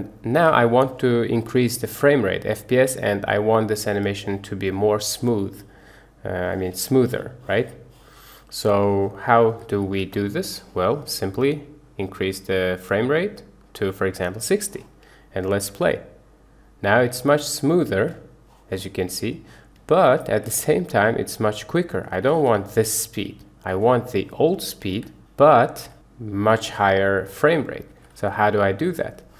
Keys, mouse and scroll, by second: 0.0 space, 0.3 space, 2.5-8.8 drag, 9.9 shift+Left, 11.4-14.6 drag, 15.5 space, 17.3 Escape, 18.0 space, 19.8 Escape, 20.3 space, 21.9 Escape, 22.6 space, 23.7 Escape, 24.9 space, 25.8 Escape, 26.6 space, 27.9 Escape.